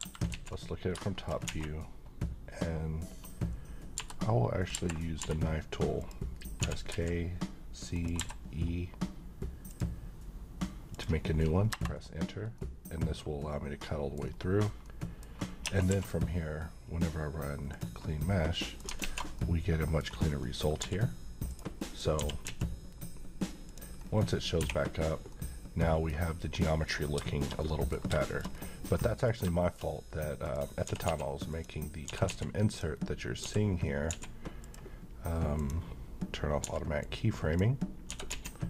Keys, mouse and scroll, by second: 0.3 alt+z, 1.0 shift+middle click, 1.5 a, 3.9 b, 4.7 Escape, 5.2 k, 6.0 click, 6.6 typing, 7.9 click, 8.1 e, 9.7 click, 12.5-13.2 middle click, 13.2 scroll down 1, 13.5-14.5 middle click, 14.2 scroll up 1, 14.8-15.5 middle click, 15.6 Tab, 15.9 q, 17.7 click, 18.3-18.9 middle click, 19.0 alt+z, 19.3-20.3 middle click, 20.1 scroll down 1, 20.4 middle click, 20.8 g, 21.5 right click, 21.8 middle click, 22.2 g, 22.4 x, 23.7 click, 24.0-24.4 scroll up 1, 24.6 1, 25.3-26.2 middle drag, 26.9 scroll down 1, 27.2 middle click, 27.3 middle click, 27.9 scroll down 1, 28.2 shift+middle click, 28.5-28.8 shift+scroll down 2, 29.1 middle click, 29.8 scroll up 1, 30.4 click, 30.8-32.3 typing, 31.5 click, 32.7 click, 33.4 s, 34.0 z, 34.6 click, 36.6 x, 37.0-37.6 click, 38.1 s, 38.3 z.